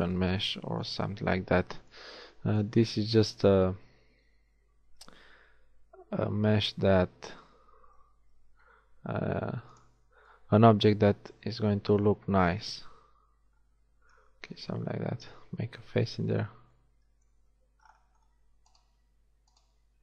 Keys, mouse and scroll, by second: 6.0 e, 12.3 KP_1, 13.0 z, 16.1 f, 17.4 z, 18.8-20.0 middle drag.